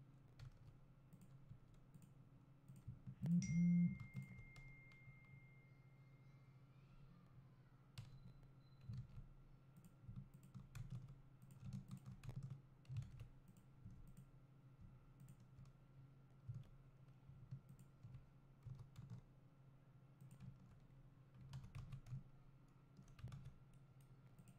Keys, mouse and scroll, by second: 1.3 x, 1.6 2, 2.1 click, 3.3 shift+click, 8.1 f, 9.0 ctrl+z, 9.9 click, 10.5 shift+click, 10.9 f, 11.5 click, 12.0 shift+click, 12.4 f, 13.1 alt+a, 13.7 click, 15.3 shift+click, 16.6 f, 17.8 alt+click, 19.0 e, 20.9-21.8 scroll down 1, 21.8 alt+a.